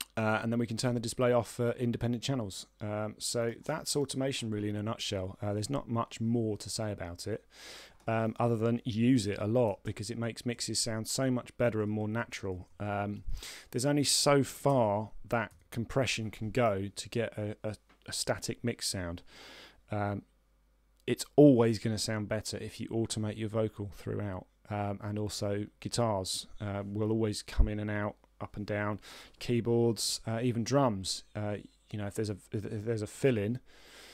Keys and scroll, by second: 9.6 ctrl+Left, 11.5 ctrl+Down, 14.7 z, 16.7 a.